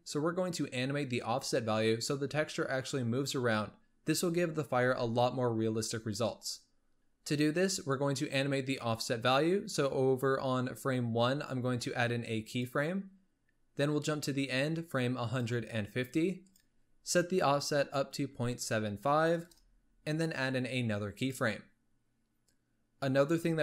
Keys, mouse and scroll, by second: 12.4-19.3 drag, 21.1 click, 23.1 click.